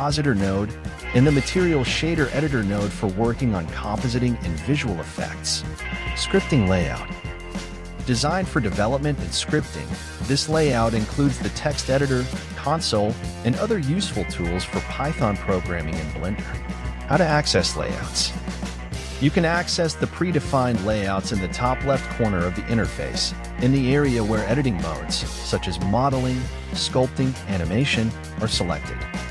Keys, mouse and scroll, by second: 7.6-8.6 drag, 10.6-29.3 drag.